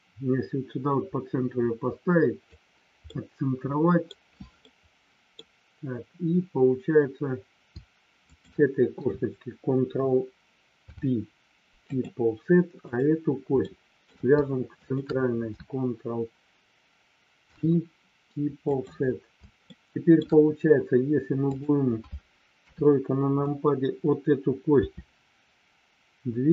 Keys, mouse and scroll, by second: 3.1-4.1 middle drag, 4.7 middle click, 8.2 shift+click, 10.7 ctrl+p, 13.6 shift+middle click, 14.7 shift+click, 17.3 ctrl+p, 19.6 shift+middle click, 21.5 click, 22.6 KP_3, 24.7 r.